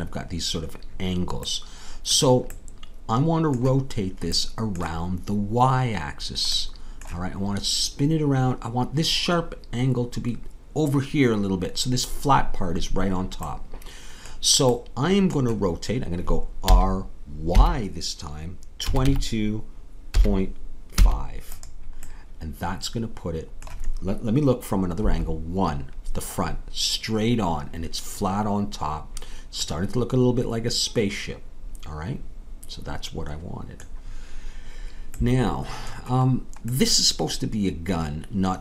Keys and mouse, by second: 16.6 r, 25.0 KP_1, 30.0-38.6 middle drag.